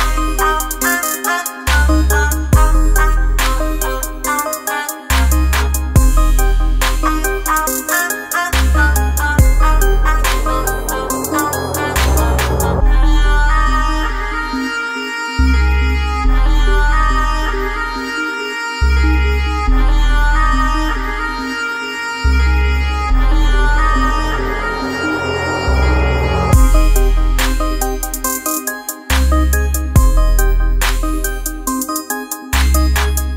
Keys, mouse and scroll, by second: 1.2 shift+click, 3.4 click, 4.0 space, 4.2 click, 4.6 space, 10.9-16.8 drag, 17.4 alt+scroll down 1, 18.0 alt+scroll down 1, 18.4 space, 18.5 click, 18.9 space, 19.8 F7, 23.5 F7.